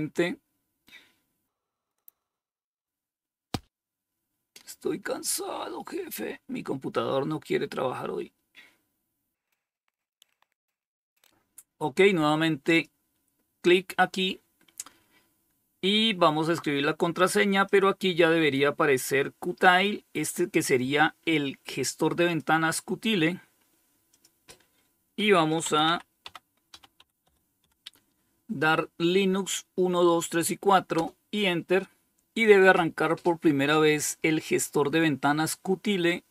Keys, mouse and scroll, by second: 11.9 click, 16.9 click, 21.5 click, 23.3 click, 24.2-27.3 typing, 30.1 Return.